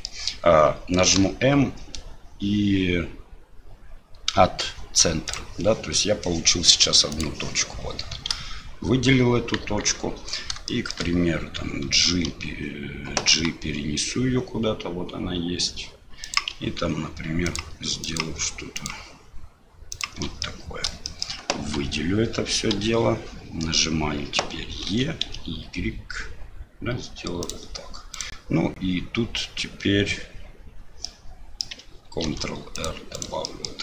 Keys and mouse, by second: 7.1 click, 8.3 a, 9.6 KP_1, 10.7 shift+click, 12.1 d, 13.3 g, 17.4 ctrl+click, 18.1 ctrl+click, 18.7 ctrl+click, 20.4 middle click, 21.0 shift+middle click, 21.8 a, 22.7 KP_7, 24.9 e, 28.1 click, 31.0 middle click, 32.2 ctrl+r, 33.5 middle click.